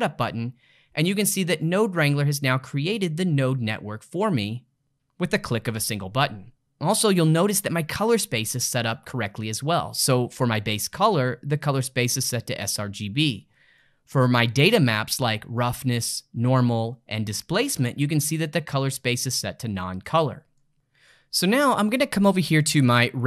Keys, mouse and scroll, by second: 6.5 middle click, 12.7-20.7 middle drag, 23.0 click.